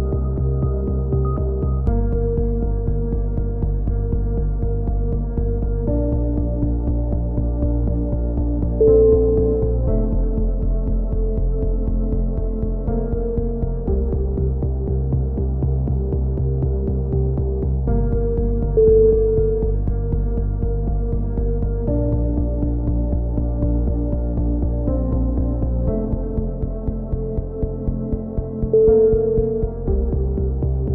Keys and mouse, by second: 0.2 f, 0.4 a, 0.5 z, 0.7-1.4 drag, 2.2-2.9 drag, 2.6-4.4 typing, 3.9-5.0 drag, 5.7-6.0 drag, 5.7 z, 6.7 f, 6.7 z, 6.9 a, 9.2 KP_1, 10.7-12.9 drag, 14.6 middle drag, 14.9-17.4 drag, 17.4-18.4 middle drag, 17.4 a, 17.6 z, 18.4-19.0 drag, 19.0-19.5 middle drag, 19.5 drag, 19.7 z, 20.2 x, 20.6 z, 20.9 Tab, 21.2 click, 24.4 Tab.